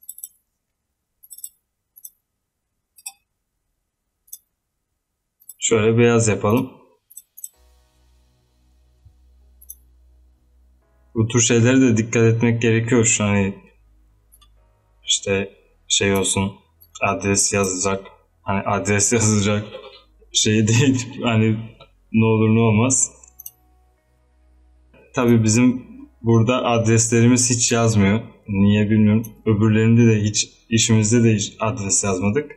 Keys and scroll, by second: 31.9 z.